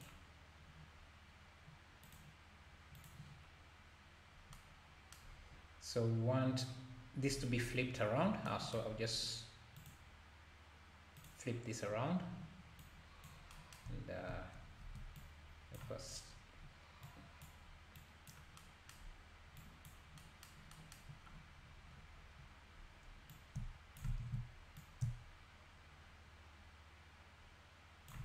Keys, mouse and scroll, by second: 2.0-4.5 drag, 8.9-9.7 scroll up 3, 9.8-12.9 drag, 15.3-16.2 alt+drag, 16.2-16.5 scroll down 2, 17.0-18.0 drag, 19.6 click, 21.6-22.3 scroll up 2, 22.3-23.3 scroll up 1, 23.3-24.3 drag, 24.3 ctrl+z, 24.8-27.8 drag.